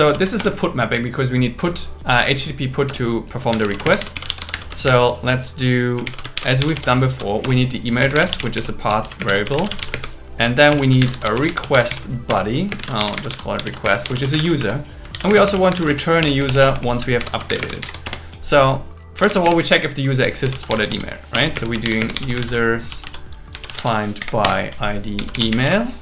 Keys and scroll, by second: 0.1 shift+m, 0.4 Return, 2.9 Return, 3.9 space, 4.9 shift+8, 6.1 alt+l, 6.4-9.9 typing, 7.5 Return, 10.7 alt+l, 11.0-14.1 typing, 12.3 Return, 14.6 Right, 15.1-17.6 typing, 17.8 alt+8, 18.1 Return, 19.4 space, 21.3 BackSpace, 21.5 space, 21.9 shift+0, 22.0 space, 24.2 Down, 24.4 Return.